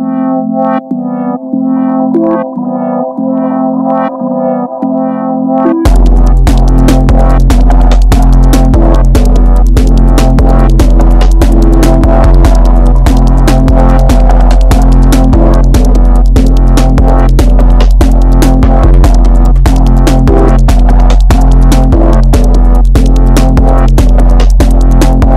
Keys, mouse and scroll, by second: 3.4 alt+z, 3.4 click, 4.6 click, 6.2 middle click, 7.1 Tab, 7.6-9.7 middle drag, 9.7 KP_3, 10.2 KP_1, 10.4-10.9 scroll down 3, 10.9-14.3 shift+middle drag, 14.3 KP_1, 15.2-17.9 middle drag, 18.0 KP_1, 18.7 shift+middle click, 19.4 scroll up 1, 19.7 middle click, 20.4-20.8 scroll up 2, 20.8 Tab, 21.1-23.2 middle drag, 23.2 click, 23.9-25.0 middle drag, 25.0 click.